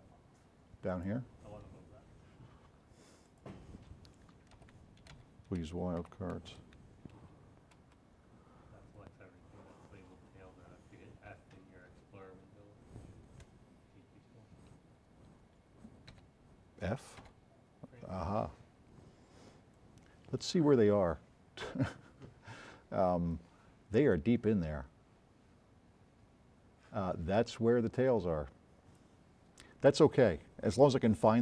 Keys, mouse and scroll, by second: 0.9 click, 3.3 click, 4.5-6.5 typing, 7.8 Return, 16.2 s, 17.3 f, 19.8-21.6 drag.